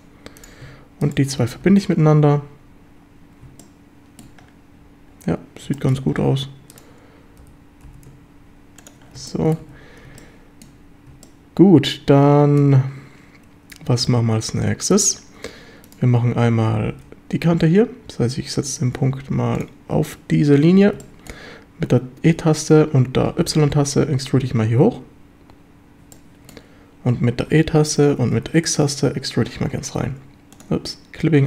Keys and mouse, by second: 1.4 f, 1.7 a, 3.6-4.2 shift+middle drag, 5.8 shift+drag, 7.4 g, 7.9 y, 8.8 ctrl+click, 9.3-9.6 shift+drag, 9.7 a, 10.2 shift+middle click, 11.3-12.6 shift+middle drag, 14.1 shift+middle click, 16.9 g, 19.6 click, 21.0 shift+middle click, 23.5 y, 26.2 shift+middle click, 28.4 x, 30.6 click.